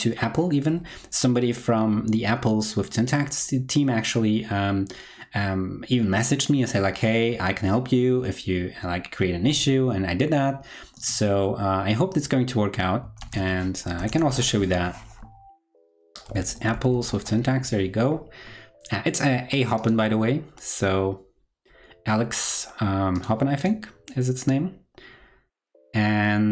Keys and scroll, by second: 13.2 super+t.